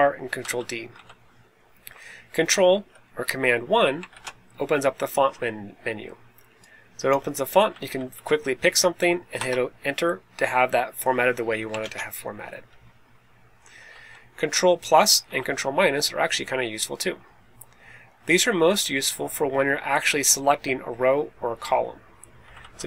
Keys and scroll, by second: 0.3 Down, 0.8 Down, 4.0 super+1, 7.6 Down, 7.8 Down, 8.0 Down, 9.3 Return, 11.7 super+d, 12.6 Right, 13.7 Down, 13.9 Left, 15.1 Down, 22.3 Down, 22.5 Down, 22.6 Down.